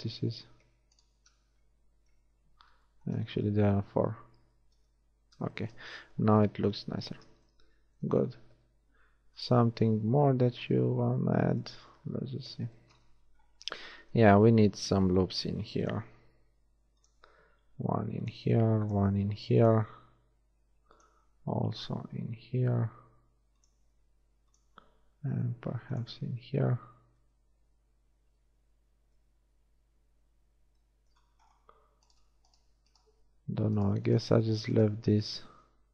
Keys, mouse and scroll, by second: 0.4 z, 1.7 z, 2.2 KP_1, 3.2 middle click, 3.9 click, 5.4 a, 7.2 Tab, 10.1 Tab, 10.7 shift+Tab, 12.0 KP_1, 13.5 Tab, 15.4 ctrl+r, 16.7 ctrl+r, 18.7 ctrl+r, 20.0 ctrl+r, 24.1 ctrl+r, 26.4 Tab, 29.6 Tab, 32.2-35.9 middle drag, 35.6 shift+z.